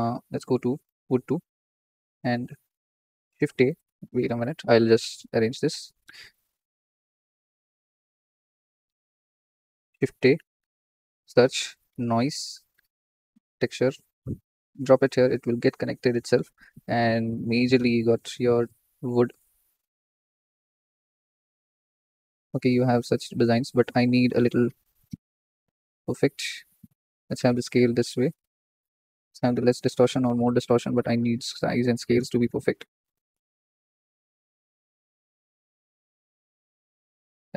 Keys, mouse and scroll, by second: 0.8-5.8 drag, 5.8 t, 7.1 click, 7.9-10.6 scroll up 3, 10.6-14.6 drag, 15.7 scroll down 2, 16.2 shift+middle drag, 16.9-19.4 middle drag, 19.4-21.4 drag, 26.3-35.6 drag, 36.2-36.7 scroll up 5, 36.7 shift+middle click, 36.9-37.5 shift+middle drag.